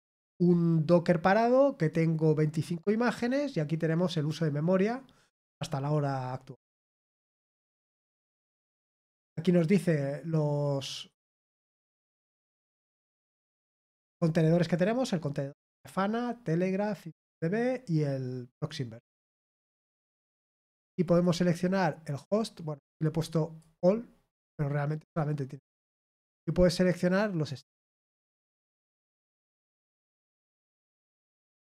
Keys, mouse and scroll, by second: 21.0 click, 23.3 click, 25.6 click, 27.6 click.